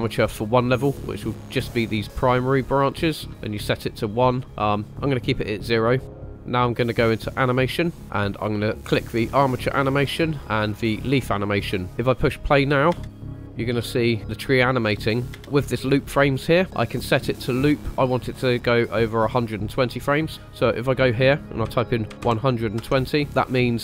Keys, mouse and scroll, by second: 6.1-7.6 drag, 9.5 click, 11.8 click, 12.9 space, 15.4 space, 20.3-23.2 drag.